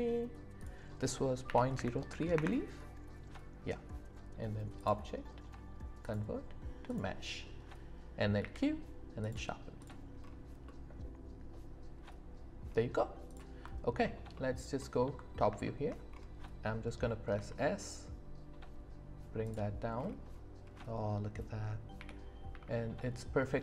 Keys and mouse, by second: 0.6-2.4 drag, 4.8-7.0 drag, 8.4 q, 10.6-12.6 middle drag, 14.3 alt+middle click, 15.6 shift+middle click, 17.3 s, 19.4 click, 20.7-21.9 drag, 21.9 g, 22.5 z.